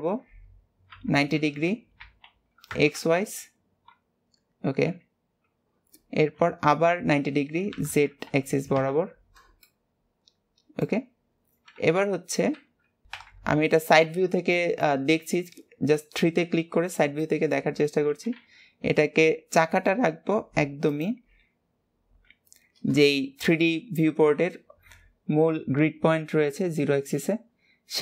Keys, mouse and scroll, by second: 1.1 r, 9.8-11.3 middle drag, 11.3 scroll up 2, 11.9 KP_1, 14.7 shift+middle click, 15.4 scroll up 1, 17.4 shift+middle click, 18.3 g, 21.6 scroll, 22.3 scroll up 2, 23.3 shift+middle click, 23.9 scroll down 6, 26.9 scroll up 1.